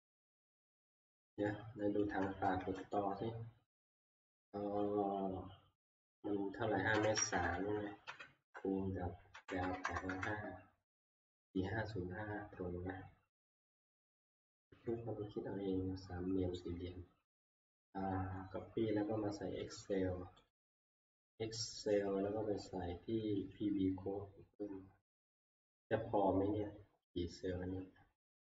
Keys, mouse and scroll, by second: 1.3 click, 2.1 click, 2.7 alt+Tab, 6.7-10.3 typing, 20.5-23.5 drag, 24.4 scroll, 28.2 scroll.